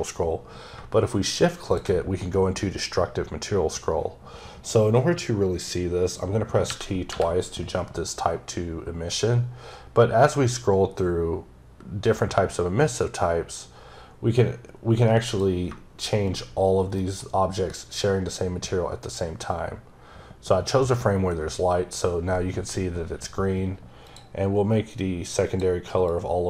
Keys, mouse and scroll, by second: 1.5 shift+Num_Lock, 1.5 click, 6.5 t, 9.1 typing, 9.2-9.9 scroll up 1, 9.9-10.5 scroll up 1, 10.5-12.6 scroll up 1, 13.7-15.1 scroll up 1, 15.1 click, 16.8 shift+right click, 23.9 click, 24.8 click, 25.9 click.